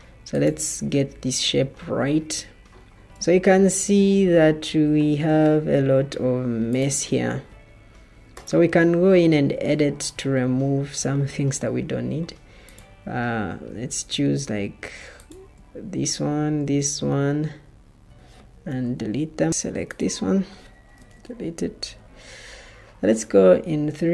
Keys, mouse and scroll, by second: 2.9 Escape, 15.9 Delete, 16.7 Delete, 19.0 Delete, 20.9 Delete.